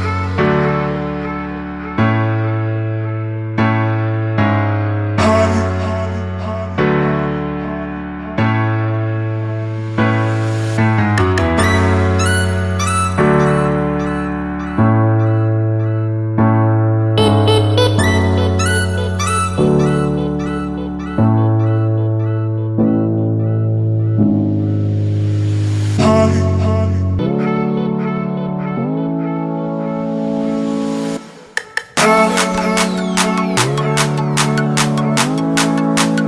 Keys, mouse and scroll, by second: 0.9 click, 1.8-5.1 scroll down 1, 7.9 click, 18.7 click, 33.5 Return, 34.3 Up, 35.0 Right.